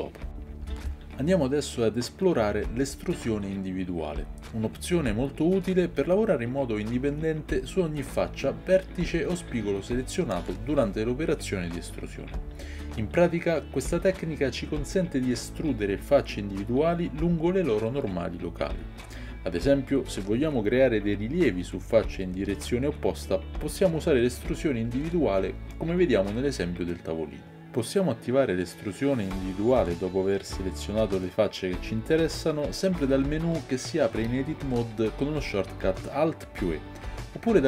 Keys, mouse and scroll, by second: 20.3-23.5 middle drag, 23.5 shift+click, 23.8-37.6 shift+middle drag, 30.6 alt+e.